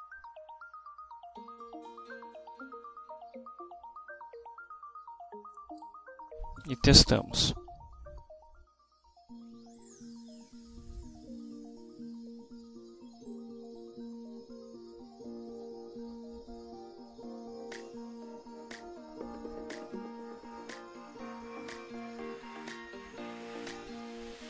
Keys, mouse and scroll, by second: 7.2 F6.